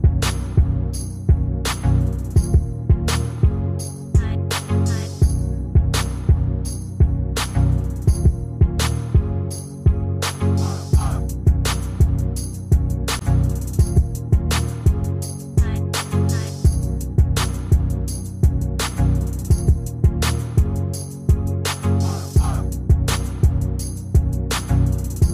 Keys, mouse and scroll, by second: 1.3 ctrl+g, 2.9 shift+click, 12.3 shift+click, 16.6-17.1 ctrl+scroll up 1, 18.5-19.2 ctrl+scroll down 1, 19.4-20.6 ctrl+scroll down 1, 20.8 ctrl+d, 21.7-22.4 ctrl+scroll up 1.